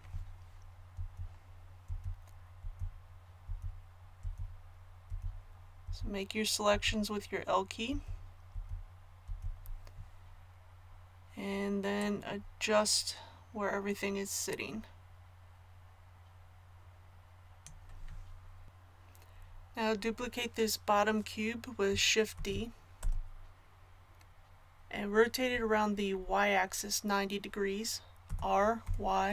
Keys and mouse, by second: 0.9 l, 1.8-8.5 l, 12.0-17.6 drag, 22.3 shift+d, 28.2 r.